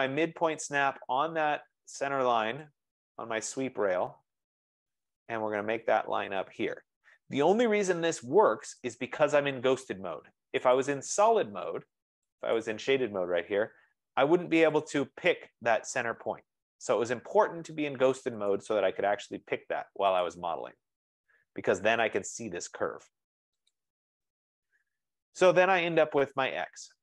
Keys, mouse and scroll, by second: 2.7 click, 3.2-4.0 scroll, 4.7-6.1 scroll, 8.8 F15, 9.0 click, 10.9 click, 12.9 click, 15.0 click, 18.8 click, 20.3 click, 22.3 click, 23.8 click, 24.4-25.2 scroll, 25.3 scroll down 8, 25.7 middle click.